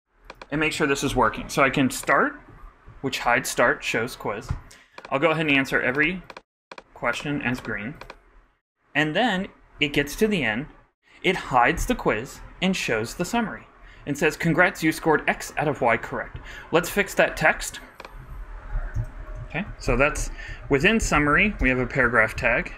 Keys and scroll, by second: 19.4 shift+Return, 19.4-20.6 typing, 22.2 super+p, 22.3 super+Right.